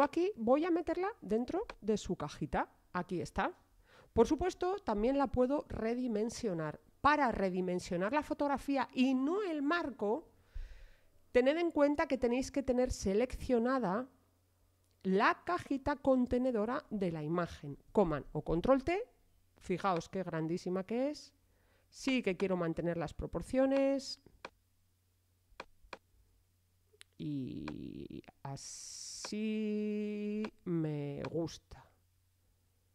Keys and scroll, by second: 18.0 super+t.